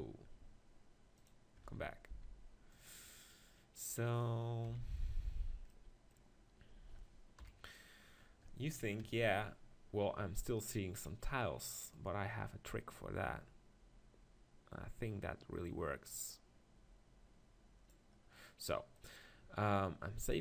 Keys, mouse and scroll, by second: 0.6 middle click, 1.2-3.3 drag, 2.1 s, 4.7 KP_7, 7.4 KP_1, 9.0 ctrl+KP_1, 11.0 middle click, 11.9 click, 12.2-13.8 right drag, 18.3 middle click, 20.1 middle click.